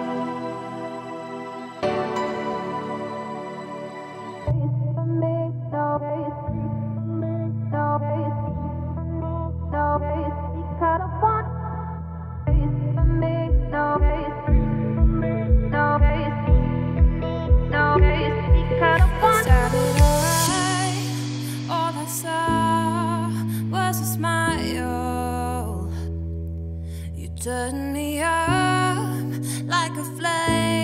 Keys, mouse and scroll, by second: 0.4 click, 0.8 scroll down 1, 0.9-2.8 middle drag, 2.8 Tab, 3.1 click, 3.3 3, 3.7 click, 4.2 middle click, 5.0 shift+d, 6.2 p, 6.7 Tab, 6.9 click, 7.1 Tab, 7.5-8.2 scroll up 2, 8.2 2, 8.4 click, 8.7 `, 9.6 shift+click, 10.1 z, 10.9 s, 15.5 click, 15.9 click, 16.3 g, 18.2 z, 18.4 scroll down 4, 18.6 middle click, 19.0-19.6 scroll up 2, 19.6 e, 21.3 scroll down 2, 21.5 middle click, 21.9-22.2 scroll up 3, 22.2 Tab, 22.5 scroll down 2, 22.6-23.4 middle drag, 23.4 Tab, 23.6 `, 24.9 z, 25.4 a, 25.7-26.4 scroll up 1, 27.4 click, 28.7 s.